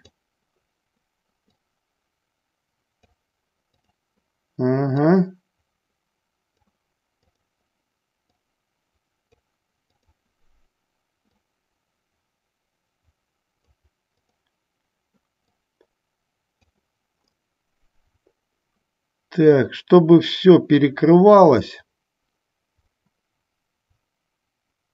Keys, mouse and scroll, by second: 0.2 click, 1.6-3.3 drag, 3.8 click, 5.1-6.8 drag, 7.3 click, 8.4 click, 11.4-13.8 drag, 14.5 click, 15.7-16.8 drag, 17.6-24.9 middle drag.